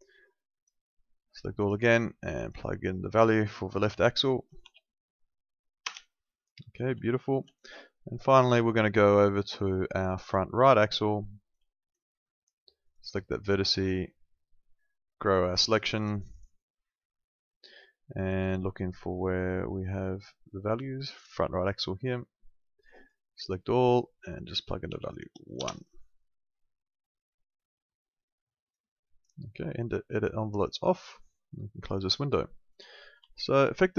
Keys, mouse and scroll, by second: 4.6 1, 5.8 Return, 7.2 alt+middle click, 8.2 alt+middle click, 10.2 click, 10.7 alt+middle click, 11.3 alt+middle click, 12.9 click, 15.6 click, 19.1 click, 23.0 click, 24.9 1, 25.6 Return, 28.7 click, 32.4 alt+middle click, 33.3 alt+middle click.